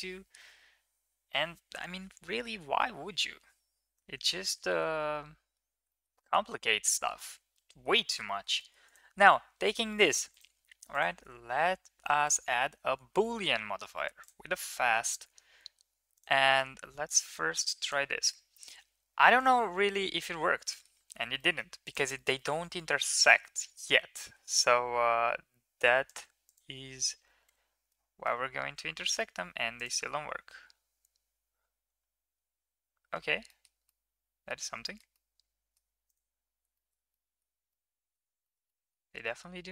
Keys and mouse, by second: 3.8 ctrl+s, 4.5 middle click, 4.9-5.4 middle drag, 5.7 middle drag, 6.0 middle drag, 6.7 shift+middle click, 7.3-7.7 middle drag, 8.1 shift+middle drag, 8.4 click, 8.7 click, 8.7 right click, 10.2-12.2 drag, 10.2-12.2 right drag, 14.0 click, 15.9 click, 19.9 h, 20.4 middle drag, 20.9 ctrl+z, 21.2 middle drag, 21.7 click, 22.0 shift+middle click, 22.2 middle click, 22.7 middle click, 24.0 g, 26.3 click, 27.2 h, 27.7-28.1 middle drag, 28.4 ctrl+z, 29.0 middle drag, 33.3 shift+middle drag, 33.7-34.3 middle drag, 34.7 shift+middle drag, 34.9-35.6 middle drag, 36.6 shift+middle click, 36.9-37.2 middle drag, 37.5-38.0 middle drag, 38.2 shift+middle click, 38.5 middle drag, 39.1 shift+middle click, 39.4 middle click.